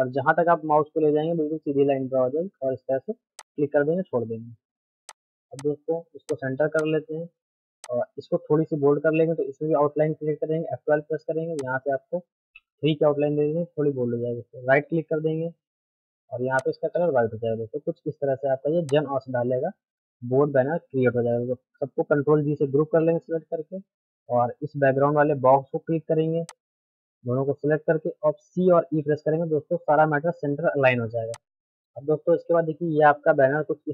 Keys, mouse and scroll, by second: 6.3 shift+click, 6.6 c, 6.8 click, 8.1 Up, 10.6 F12, 11.6 click, 15.8 right click, 16.6 shift+click, 16.9 c, 18.3 middle click, 18.9-22.7 drag, 22.7 ctrl+g, 26.5 shift+click, 28.5-28.9 typing, 31.3-33.3 drag, 33.3 shift+F2.